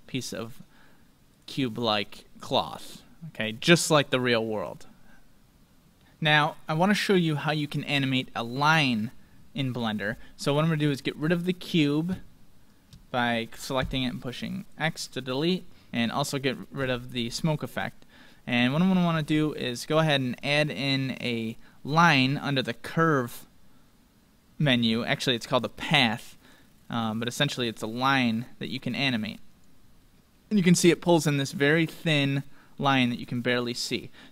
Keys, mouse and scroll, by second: 1.4-4.4 drag, 6.0-7.8 middle drag, 10.0-13.2 middle drag, 11.2-13.6 right drag, 13.7 x, 15.9 ctrl+click, 15.9-18.0 ctrl+right drag, 16.8 x, 18.0-19.1 middle drag, 27.1-28.9 middle drag, 28.7-30.9 drag, 28.9 scroll up 1, 29.9-30.9 scroll up 1, 30.9-34.3 middle drag.